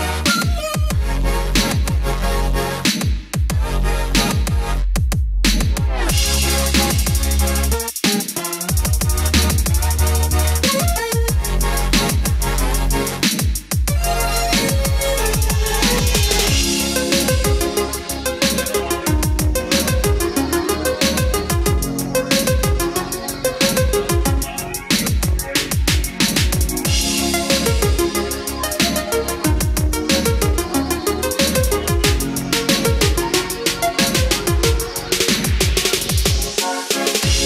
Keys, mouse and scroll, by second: 1.5 KP_1, 3.3 Tab, 7.2 click, 8.9-11.9 middle drag, 12.6-22.2 drag, 23.2 scroll down 1, 24.0-24.4 scroll up 1, 25.2 click, 37.0 scroll down 1.